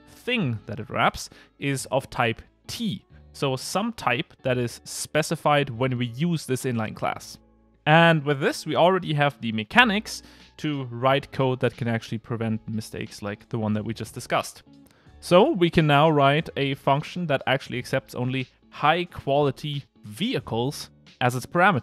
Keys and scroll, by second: 19.1 Return.